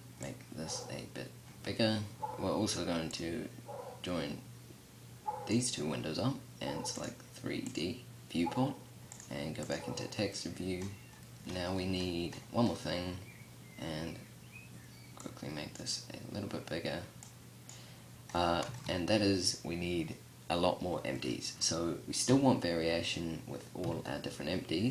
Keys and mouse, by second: 0.5-2.0 drag, 2.7-5.0 drag, 8.5-9.0 drag, 9.1 click, 9.5-11.4 middle drag, 11.5-12.7 middle drag, 17.5-23.3 middle drag, 21.7 KP_7, 23.3 KP_5.